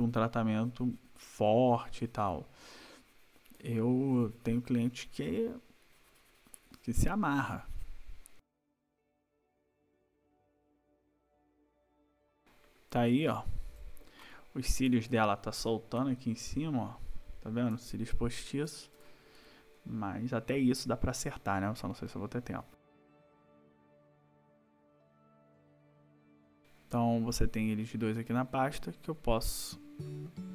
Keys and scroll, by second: 8.7 ], 9.8 \, 10.1 \, 10.8 \, 11.8 \, 12.1 ctrl+-, 14.9 ctrl+=, 18.4 ctrl+-, 22.9 ctrl+=, 23.1 space, 23.7 ], 24.6 \, 25.6 space, 26.0 ctrl+-.